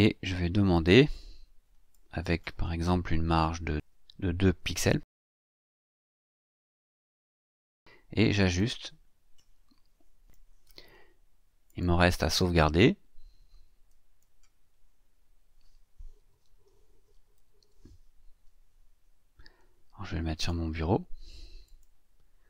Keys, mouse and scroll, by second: 0.7 click, 1.9 click, 3.2 KP_2, 3.7 Tab, 4.6 KP_2, 4.9 Tab, 5.2 KP_2, 5.6 Tab, 6.7 KP_2, 8.4 click, 10.2 click, 11.6 click, 13.9 click, 15.9-18.1 typing, 20.3 click, 21.6 click.